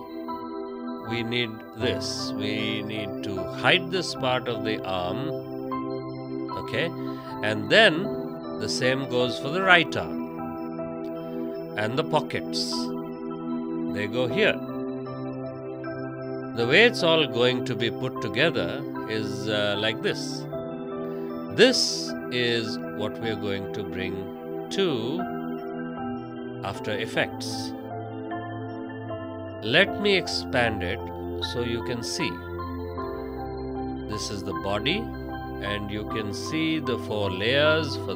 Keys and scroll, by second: 4.4 ctrl+z, 6.0 space, 14.0 space, 23.8 space, 28.8 ctrl+z, 33.9 ctrl+z, 35.3 space.